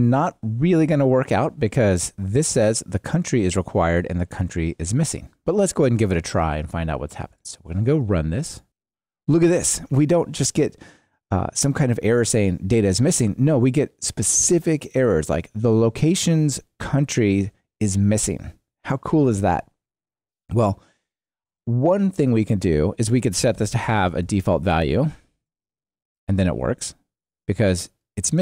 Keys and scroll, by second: 8.6 ctrl+shift+r, 25.3 ctrl+r.